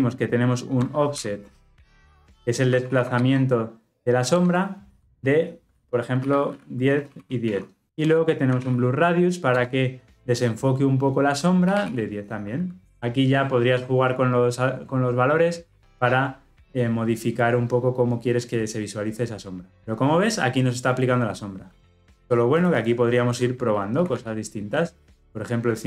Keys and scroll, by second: 1.5 Return, 4.3 alt+Return, 9.5 Return.